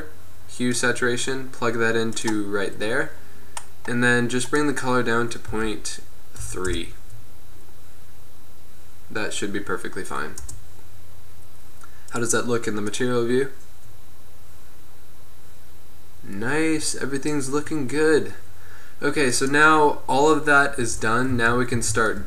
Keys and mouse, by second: 2.5-6.5 drag, 10.8 KP_0, 12.3-15.0 drag, 15.8-19.4 middle drag, 19.4-20.9 drag, 20.9 KP_7, 21.4 z, 21.9 a.